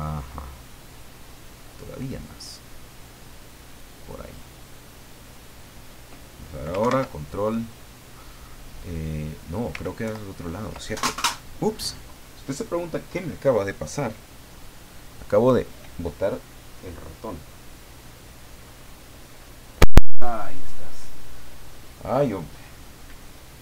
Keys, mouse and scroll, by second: 6.8 ctrl+Right, 10.0 ctrl+Left, 10.9 ctrl+scroll down 2, 11.1 ctrl+scroll up 3.